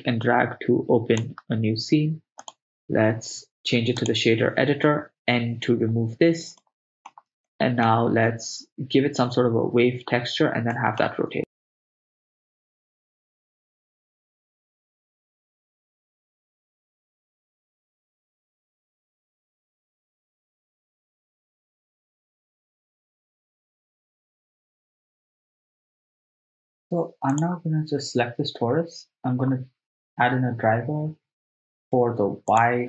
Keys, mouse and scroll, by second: 2.4-4.1 drag, 5.6 n, 6.6 ctrl+middle click, 7.5 shift+middle click, 10.8 middle click, 11.5 shift+a, 11.7 click, 12.0 middle click, 12.2 right click, 12.2 r, 12.3 x, 12.6 right click, 12.8 click, 13.2 ctrl+middle click, 13.4 ctrl+middle click, 13.4 right click, 13.6 click, 13.6 shift+a, 14.7 click, 15.4 click, 15.9 middle click, 15.9 click, 16.4 click, 16.9 right click, 17.0 r, 17.0 x, 17.2 right click, 17.3 middle click, 17.3 click, 17.8 r, 17.8 y, 18.1 click, 18.1 right click, 18.6 click, 19.0 click, 19.3 r, 19.4 y, 20.2 click, 20.9 click, 20.9 right click, 21.4 ctrl+middle click, 21.5 click, 21.6 shift+d, 21.7 click, 21.8 click, 21.9 click, 22.1 click, 22.4 click, 22.5 shift+a, 22.7 shift+middle click, 23.2 shift+s, 23.5 click, 23.6 drag, 23.7 click, 23.8 click, 24.4 click, 24.5 click, 24.5 ctrl+middle click, 24.8 r, 24.8 z, 24.9 y, 25.1 right click, 25.2 ctrl+middle click, 25.5 ctrl+middle click, 25.7-26.4 ctrl+z, 26.5 click, 26.6 right click, 26.6 x, 27.4 click, 32.5 click.